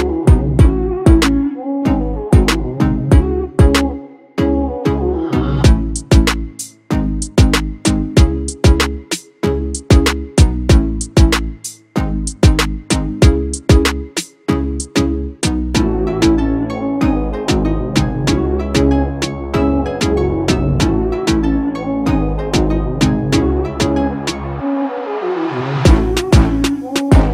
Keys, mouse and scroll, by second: 1.4 Return.